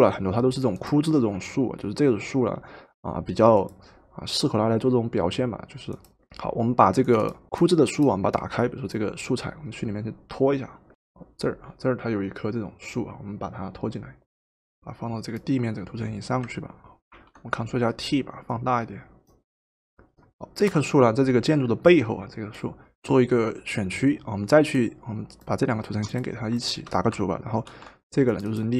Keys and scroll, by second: 10.9 Delete, 17.2 ctrl+t, 20.6 Return, 27.7 ctrl+g.